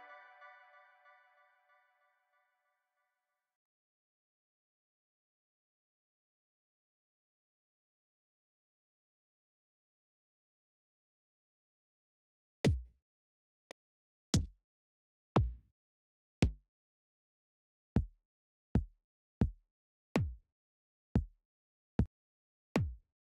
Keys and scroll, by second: 0.0-0.4 typing, 10.3 v, 11.5-23.3 typing, 14.6 Down, 16.9 Down, 19.5 Down, 20.5 Up, 21.6 Down.